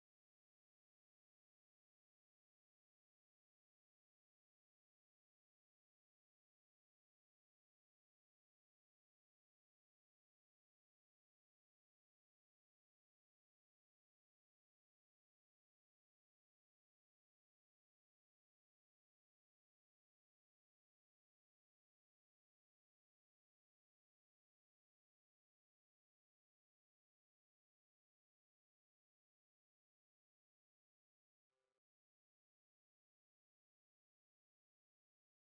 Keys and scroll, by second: 4.6 ctrl+space, 14.5 ctrl+space, 16.1 ctrl+=, 21.3 ctrl+space, 27.1 ctrl+space, 33.8 ctrl+space.